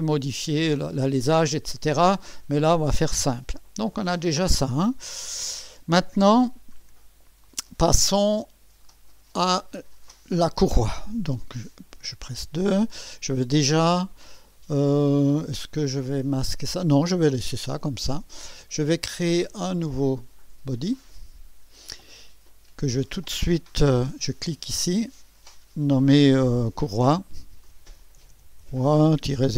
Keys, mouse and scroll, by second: 1.3-3.2 drag, 3.9 Tab, 5.1 Tab, 6.8 scroll down 1, 7.4-8.7 drag, 8.9-9.8 drag, 11.6-12.3 typing, 20.9 click, 22.9 click, 24.7 click, 25.3 F2, 27.3-29.5 typing.